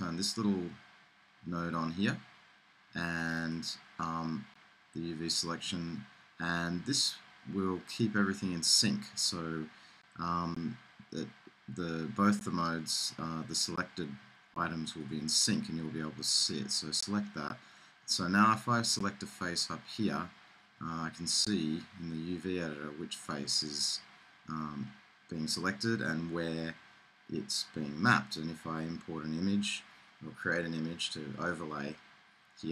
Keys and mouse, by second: 4.5-6.0 middle drag, 15.8-17.6 middle drag, 19.4-20.9 drag.